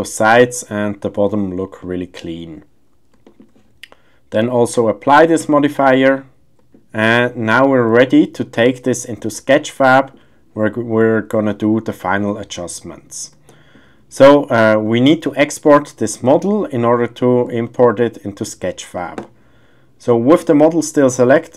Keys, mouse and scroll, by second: 0.3-0.8 middle drag, 1.8-2.2 middle drag, 3.1 shift+scroll, 3.2 shift+middle click, 4.4-5.7 drag, 6.7 middle click, 7.1 shift+scroll, 7.2 shift+middle click, 8.0 shift+middle click, 8.4-9.2 middle drag, 9.9 shift+middle click, 10.0 shift+scroll, 13.5 shift+middle drag, 16.4 shift+middle drag, 16.9-17.4 middle drag, 17.6-18.4 shift+middle drag.